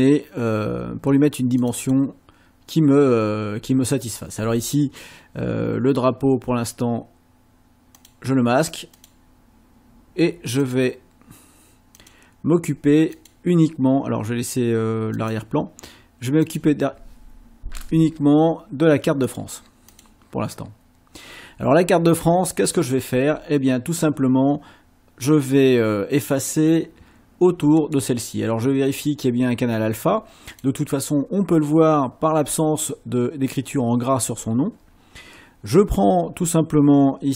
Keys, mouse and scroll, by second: 1.6 click, 8.0 click, 8.9 click, 10.7 click, 12.0 click, 13.1 click, 15.2 click, 16.5 click, 19.3 click, 19.9 click, 27.8 right click, 30.5 click.